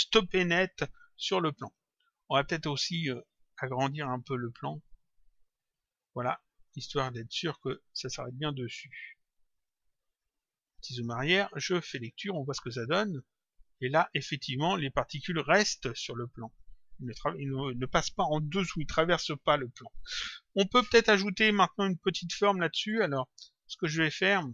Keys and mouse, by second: 1.4 click, 3.1 click, 4.7 click, 7.6 click, 8.7 click, 10.1 click, 11.7 click, 22.6 click.